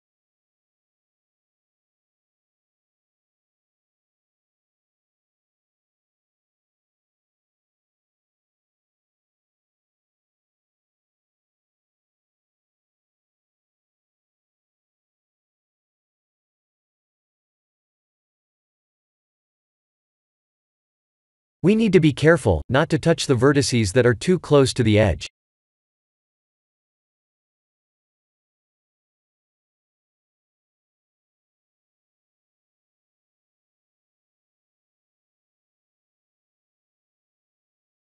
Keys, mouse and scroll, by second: 5.9 ctrl+z, 7.0 c, 26.3 shift+z, 27.4 Tab, 28.0 click, 28.9 middle click, 31.3 scroll up 2, 32.1 click, 35.2-36.1 scroll down 3, 35.7 Tab, 36.1 middle click, 36.7 middle click, 36.9 click, 37.3 middle click.